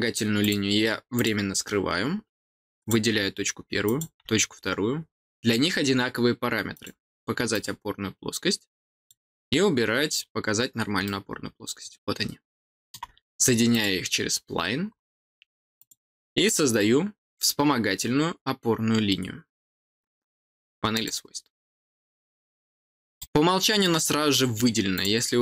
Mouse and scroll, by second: 0.3 click, 1.1 click, 2.7 click, 3.8 click, 6.7 click, 7.5 click, 8.9 click, 11.0-12.9 middle drag, 13.6 click, 14.8 middle click, 15.1 middle click, 15.7 click, 20.9 click, 22.0-22.4 scroll down 4, 23.1 middle click, 24.0-24.5 scroll up 4, 24.9-25.4 drag.